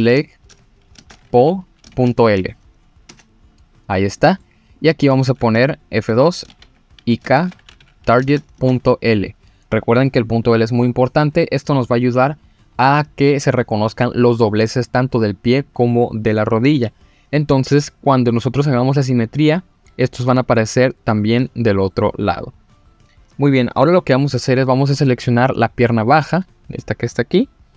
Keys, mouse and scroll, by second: 4.2 middle click, 4.7 click, 5.5 F2, 25.9 click, 26.2 middle click.